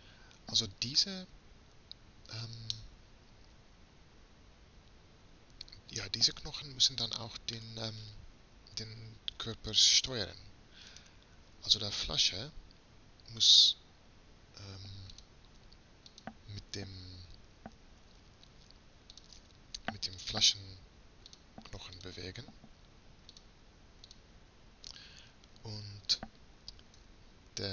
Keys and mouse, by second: 11.0-12.7 right drag, 18.0-19.2 middle drag, 20.8-27.7 drag.